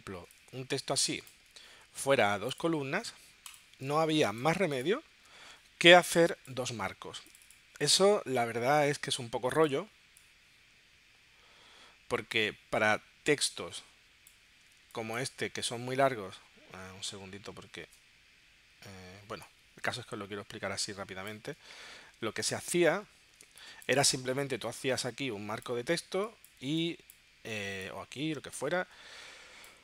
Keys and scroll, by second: 3.9 space, 14.9 space, 23.4 space, 26.7 space.